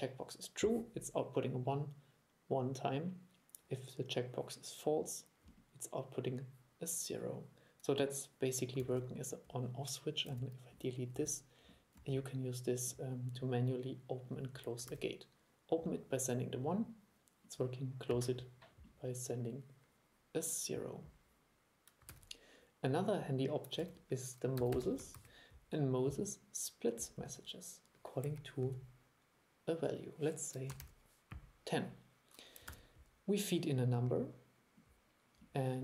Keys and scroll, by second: 8.9 super+e, 15.0 super+e, 22.2 super+e, 23.9 super+1, 32.8 super+3.